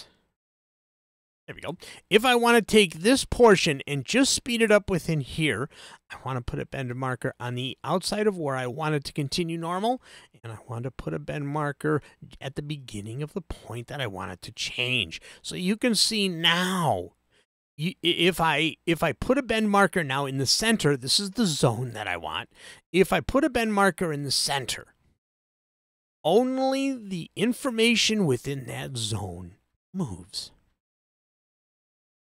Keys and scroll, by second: 1.1 super+z.